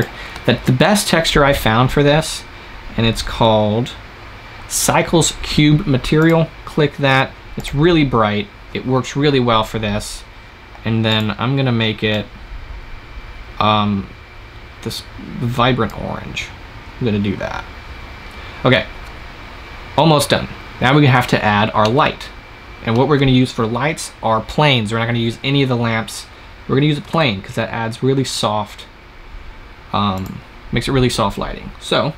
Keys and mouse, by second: 2.6-5.6 middle drag, 5.6-12.8 drag, 21.7-24.0 drag, 27.0 shift+a.